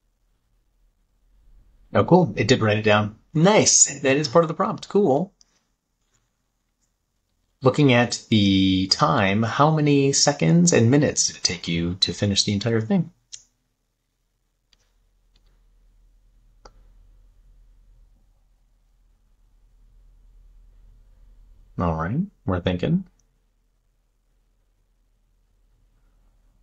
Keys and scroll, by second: 14.7 super+v.